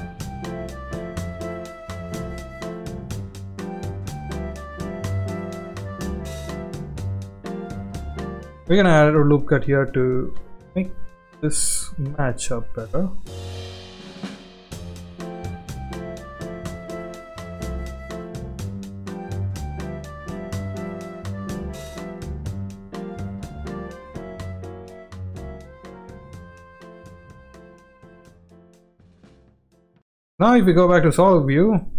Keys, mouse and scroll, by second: 0.7 s, 1.3 e, 2.6 e, 3.2 s, 4.6 shift+middle click, 5.1 e, 6.3 s, 9.0 ctrl+r, 10.3 s, 13.4 click, 14.4 alt+click, 14.8 alt+click, 15.5 alt+click, 15.8 click, 16.2 alt+click, 17.3 e, 18.7-22.3 typing, 22.1 ctrl+z, 23.3 shift+middle click, 23.7 e, 25.3 g, 26.7 s, 28.8 Tab, 29.1-30.0 middle drag, 30.2 z, 30.8 shift+middle drag, 31.4-31.8 middle drag.